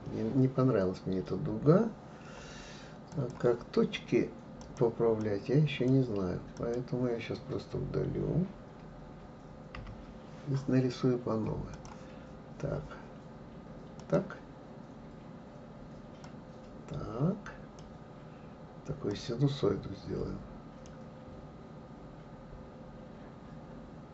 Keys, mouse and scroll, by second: 3.1-4.8 drag, 5.2 click, 6.6 click, 9.8 Delete, 11.7-14.7 drag.